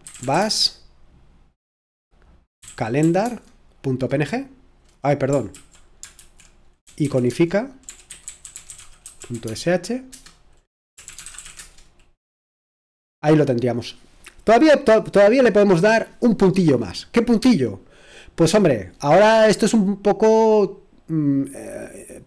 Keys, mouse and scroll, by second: 0.0-0.8 typing, 2.3-3.1 typing, 3.2 Tab, 5.3-6.0 typing, 6.8 alt+f, 7.6-12.1 typing.